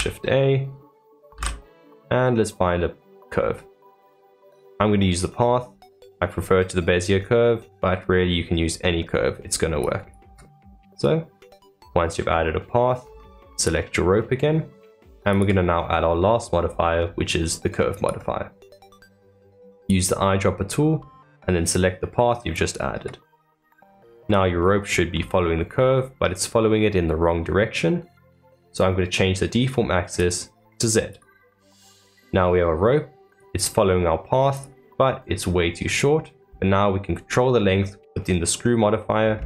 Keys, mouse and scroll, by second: 10.7-12.2 middle drag, 12.2 Tab, 13.0 Tab, 13.5 click, 15.2-18.4 drag, 19.7 click, 23.4-24.0 middle drag, 24.0 scroll down 3, 24.6-25.7 middle drag, 25.7 scroll up 2, 30.1-31.6 drag, 31.6-33.2 middle drag, 33.2 click, 34.5 click, 35.0-38.0 scroll down 2.